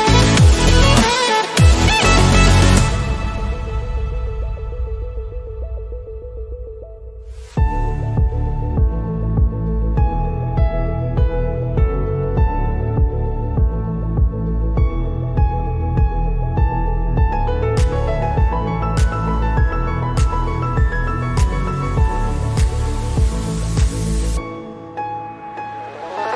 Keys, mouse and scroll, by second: 4.9 click, 8.3-16.6 drag, 17.2-22.7 ctrl+drag, 22.7 shift+click, 23.8-26.3 ctrl+drag.